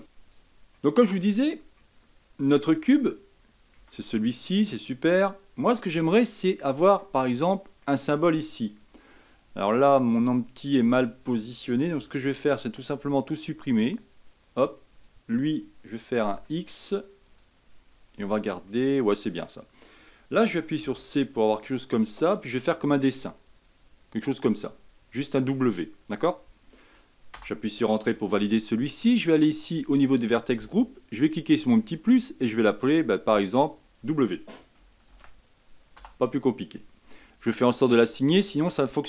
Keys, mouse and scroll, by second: 0.0 click, 0.6-1.3 middle drag, 1.3-1.7 scroll down 3, 1.7-2.7 middle drag, 2.7-3.7 drag, 3.7 Tab, 4.1 middle click, 4.7 scroll up 2, 5.8 a, 6.3 middle click, 7.1 scroll down 2, 7.4-11.9 middle drag, 11.9 Tab, 13.9-16.2 drag, 16.2 x, 17.2-18.1 drag, 18.1 Tab, 18.6-20.7 middle drag, 20.7 c, 27.8-29.8 middle drag, 29.8-38.9 drag, 38.9-39.0 middle drag.